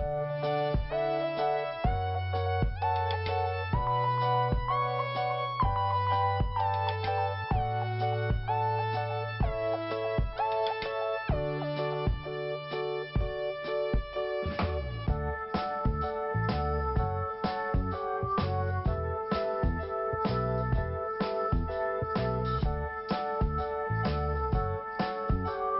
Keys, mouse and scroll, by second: 0.9 click, 2.8 click, 3.9 click, 7.8 click, 9.1-9.4 scroll up 1, 10.0 click, 10.8 scroll down 1, 11.7 click, 11.8 click, 13.2 scroll down 1, 14.8 click, 14.9 click, 16.5 i, 17.3 scroll up 2, 18.4 click, 18.4 click, 19.6 click, 22.7 click, 22.7 click, 22.8 click, 22.9 double click, 23.0 double click, 23.0 double click, 24.3 click, 24.4 click, 25.1 click, 25.2 click.